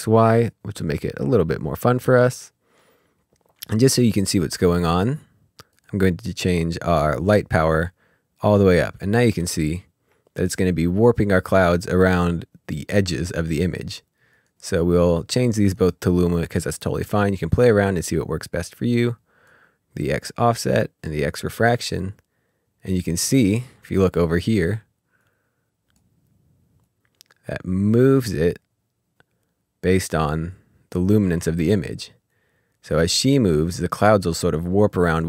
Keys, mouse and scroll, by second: 4.5 click, 9.5-10.2 scroll up 3, 14.3 click, 18.7 click, 25.2 click, 26.3 click, 29.5 click, 31.8 click, 35.0 click.